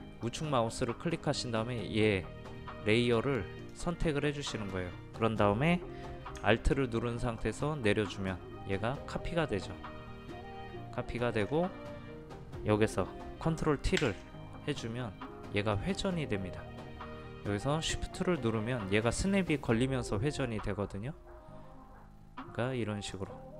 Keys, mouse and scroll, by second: 0.2 right click, 3.6 click, 7.4-11.5 alt+drag, 15.7-23.1 drag.